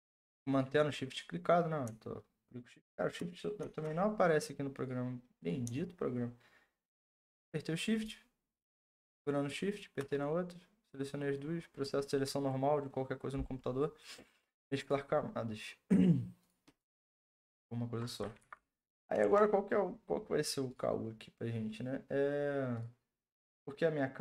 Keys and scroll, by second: 18.4 ctrl+t, 19.2 Return.